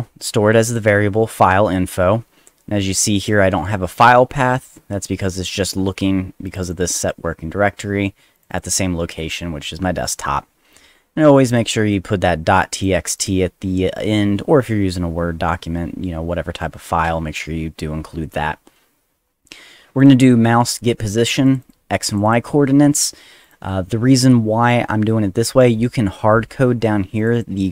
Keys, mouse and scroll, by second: 0.7 click, 0.8 click, 3.2 click, 6.5 click, 6.6 click, 8.3 click, 8.5 click, 11.5 click, 11.9 click, 13.2 click, 20.0 click, 20.1 click, 21.4 click, 21.6 click, 22.1 click, 22.2 click, 23.4 click, 27.2 click, 27.3 click.